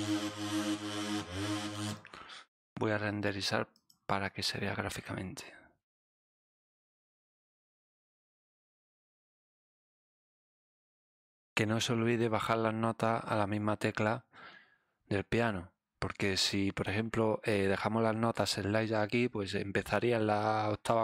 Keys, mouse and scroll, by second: 1.7 click, 3.7 click, 6.7 click, 7.9 click, 9.1 click, 9.5 click, 12.1-16.8 drag.